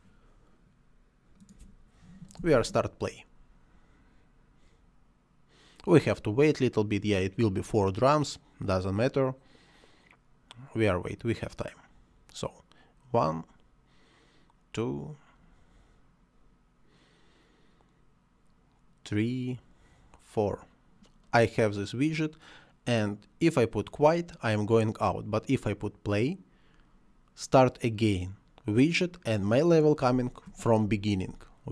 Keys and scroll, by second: 2.7 space, 30.1 space.